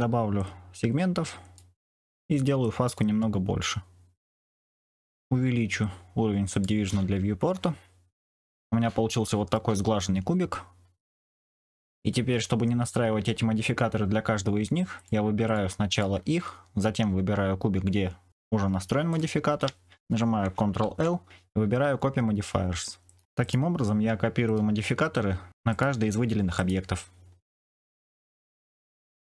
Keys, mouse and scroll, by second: 0.4-1.5 drag, 2.5-4.7 drag, 6.5 click, 8.3-9.5 middle drag, 11.0 shift+middle click, 14.9 click, 15.4 shift+click, 19.0 shift+click, 20.7 ctrl+l, 23.4 click, 25.7 click, 26.5 click, 27.5 click.